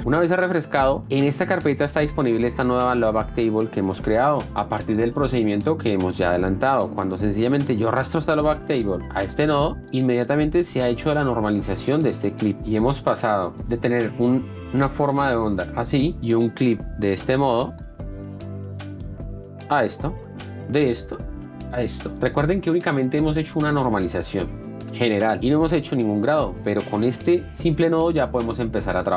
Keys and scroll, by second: 4.0 F1, 15.7 f, 16.1 d, 19.9 d.